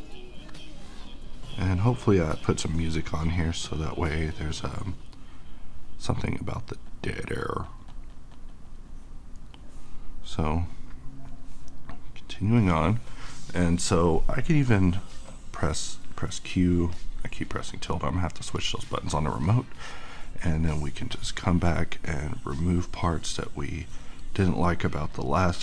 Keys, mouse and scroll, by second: 13.4-16.1 middle drag, 16.9 click, 17.2 q, 18.6 click, 19.1-20.5 middle drag, 20.5-25.6 drag.